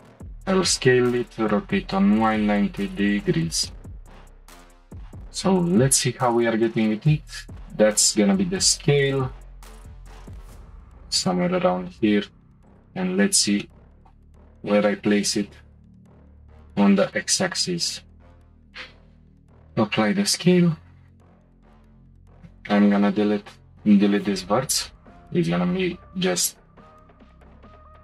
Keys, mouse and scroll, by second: 0.4 r, 3.7 shift+middle click, 4.7-5.0 scroll down 1, 5.9 s, 8.7 g, 12.6 click, 13.6-15.1 shift+middle drag, 15.1 g, 18.9 shift+middle click, 19.1-21.0 scroll up 1, 21.7 click, 21.9 1, 22.7 Delete.